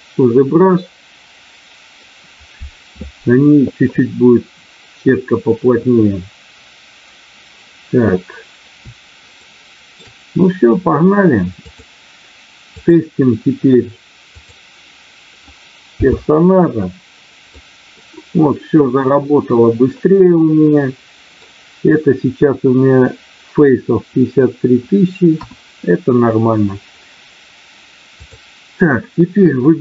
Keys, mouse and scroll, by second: 9.2 shift+middle click, 14.3 click, 15.9 n, 17.7-21.5 middle drag, 25.3 KP_1, 28.1 click.